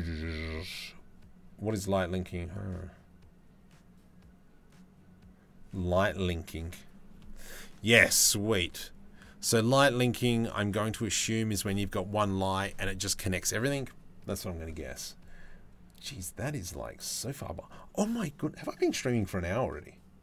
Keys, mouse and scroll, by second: 9.0 click.